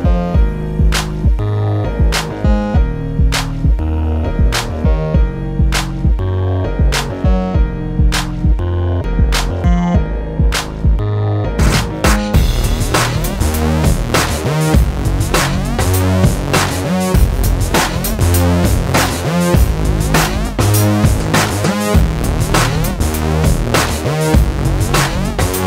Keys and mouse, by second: 0.4 j, 2.0-4.3 typing, 5.3 middle click, 5.3 j, 5.9 j, 6.4 j, 7.1 j, 8.1 right click, 8.4 j, 10.1-15.2 typing, 13.5 middle click, 16.3-22.9 typing, 24.2 j, 25.3 j.